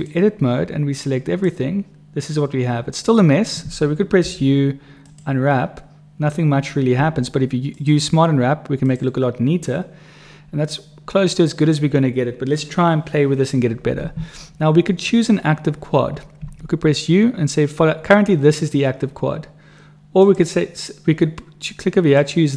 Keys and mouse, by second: 0.0 click, 1.0 click, 4.3 u, 7.0 u, 16.4 u, 20.2 click, 22.1 click.